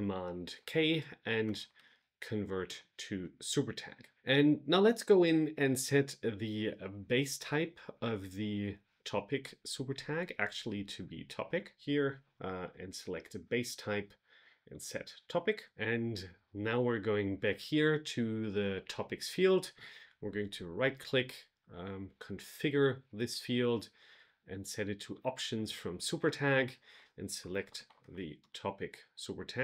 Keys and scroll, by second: 2.6 Return, 28.3 Return.